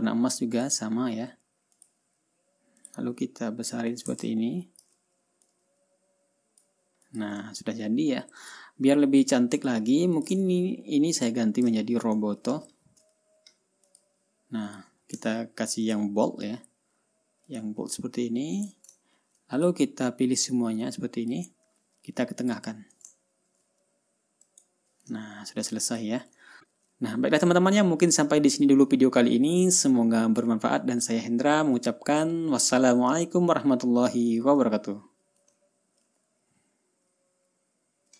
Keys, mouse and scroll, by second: 1.1 click, 2.3 click, 3.3 click, 4.4-5.5 ctrl+shift+drag, 6.0-7.3 drag, 7.6 click, 8.1 ctrl+scroll down 1, 8.3 ctrl+scroll up 1, 9.0 ctrl+click, 10.1 click, 10.7 ctrl+click, 10.9 ctrl+a, 11.8 click, 12.4-13.6 typing, 14.4 click, 14.7 middle click, 15.2 click, 15.5 ctrl+middle click, 15.8 ctrl+a, 16.4 click, 18.0 click, 19.1 click, 19.5 ctrl+scroll down 2, 20.1 ctrl+click, 21.0 click, 23.8 ctrl+scroll up 2, 25.0 click, 25.7-26.1 ctrl+scroll down 4, 26.4 ctrl+click, 27.0 ctrl+scroll up 2, 29.0 ctrl+scroll down 2, 34.4-34.8 ctrl+scroll up 3.